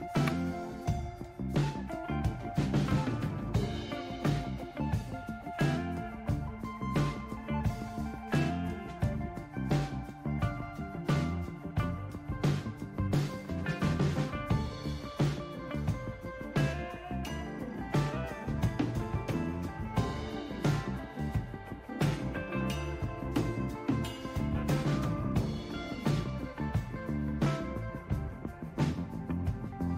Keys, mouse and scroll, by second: 3.3-4.7 scroll down 1, 4.7-5.5 scroll down 1, 5.5 scroll down 1, 12.0-13.4 scroll up 1, 13.4-14.8 scroll up 1, 14.8-15.6 scroll up 1, 15.6-16.6 scroll up 1, 16.6-17.5 scroll up 1, 17.5-18.2 scroll up 1, 18.2-19.7 scroll up 1, 19.7-20.5 scroll up 1, 20.5-21.7 scroll up 1, 21.7-22.8 scroll up 1, 24.8-25.8 scroll down 1, 25.8-27.1 scroll down 1, 27.1-28.5 scroll down 1, 28.5-29.7 scroll down 1, 29.7-29.9 scroll down 1.